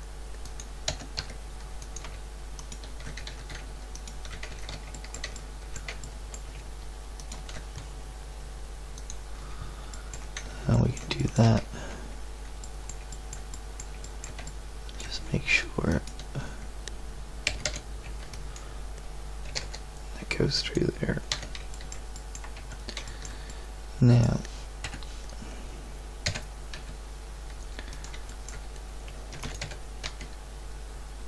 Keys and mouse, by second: 0.9 e, 2.7 click, 3.3 ctrl+z, 4.5 ctrl+z, 4.9 middle click, 8.9-10.9 middle drag, 14.2 middle click, 17.5 z, 17.6 a, 18.0 b, 19.5 g, 21.3 z, 22.1 click, 22.5 Tab, 24.8 KP_1, 26.2 g, 29.3 shift+d, 29.6 g.